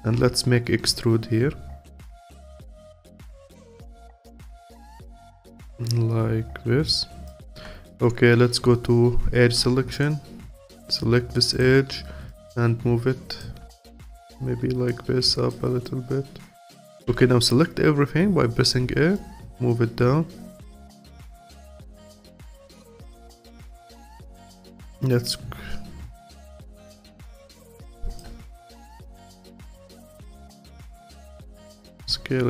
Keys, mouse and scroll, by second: 0.1 e, 5.2-9.4 alt+drag, 9.4 2, 10.0 click, 11.5 click, 13.7-14.9 alt+drag, 15.8-17.1 alt+drag, 17.1 a, 19.1 click, 21.7-24.4 alt+drag, 25.1 click, 27.2-31.9 alt+drag, 31.9 s.